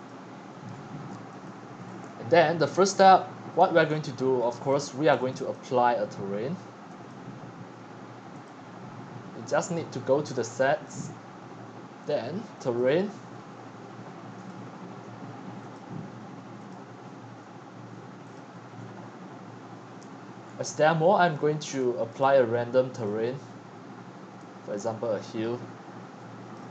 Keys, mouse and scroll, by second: 0.0 click, 0.7-1.3 scroll, 1.5-2.3 click, 1.9 click, 2.3 click, 2.5-5.2 typing, 3.9 click, 4.0 middle click, 4.0-4.7 scroll, 5.1 click, 5.5-7.7 drag, 8.7-9.5 drag, 12.5 click, 14.3 click, 15.6 click, 16.6-20.3 drag, 20.3 middle click, 20.3-20.8 scroll, 20.8-21.8 scroll up 6, 21.8-24.0 drag, 24.9 click, 26.5 click.